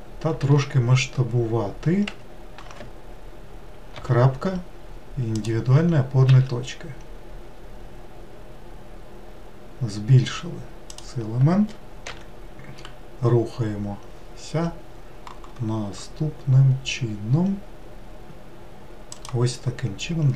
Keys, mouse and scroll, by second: 0.5 s, 4.0 ., 6.3 s, 12.1 e.